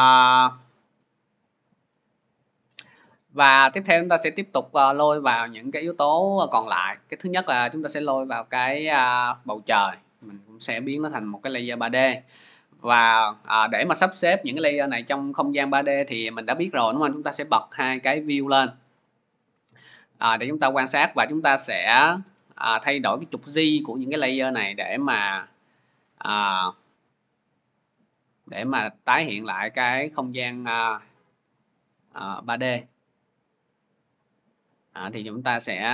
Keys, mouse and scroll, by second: 7.4 click, 9.3 click, 17.2 click, 17.8 click, 20.5 scroll, 21.0-21.5 scroll, 25.1 click, 25.9-27.3 scroll, 29.5 click, 30.7 scroll, 35.4 scroll.